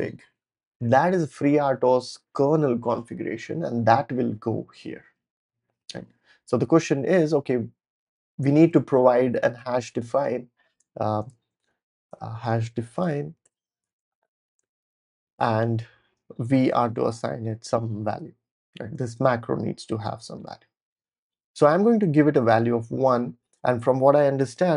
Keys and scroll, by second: 9.6 super+c, 11.2-14.6 typing, 14.8 super+v, 15.0 Return, 15.7-19.2 typing, 20.3 Tab, 22.0 1, 22.6 super+s.